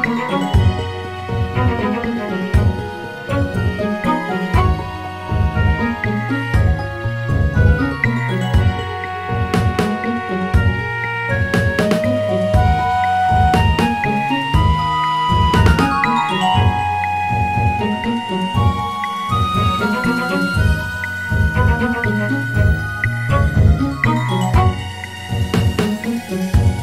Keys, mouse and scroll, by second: 1.3 Tab, 4.5 click, 6.6-8.1 scroll up 1, 8.1 click, 8.8 alt+shift+click, 10.3 click, 12.2 r, 17.8 s, 24.4 r.